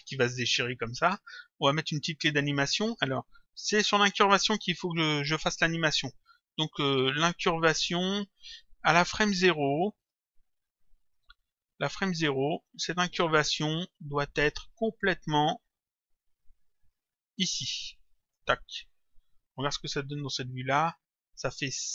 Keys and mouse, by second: 4.2 click, 11.1 middle click, 12.2 middle click, 14.8 click, 16.2 click, 19.3 middle click, 21.1 click.